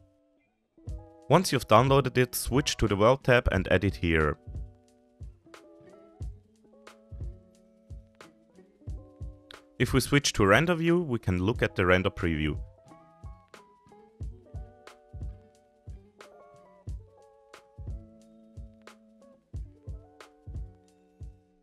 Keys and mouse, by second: 0.9 click, 4.1-6.0 drag, 17.0-17.8 middle drag.